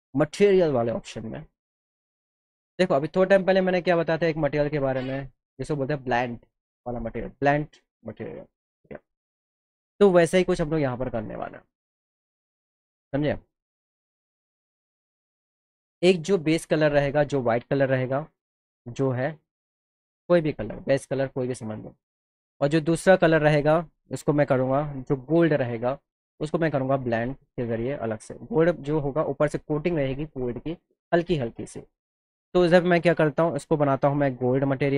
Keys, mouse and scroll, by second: 0.7 click, 17.4 click, 18.5 click, 20.0 click, 23.1 click, 24.3 click, 24.5 click, 26.8 click, 33.7 click.